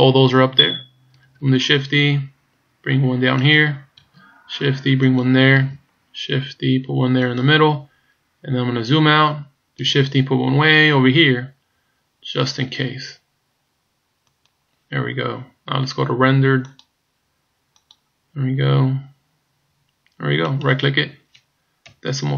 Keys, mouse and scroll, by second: 1.4 shift+d, 4.1 shift+d, 5.6 shift+d, 8.7-9.1 scroll down 3, 9.9 shift+d, 15.1-16.6 scroll down 1, 16.6 click, 21.3 right click.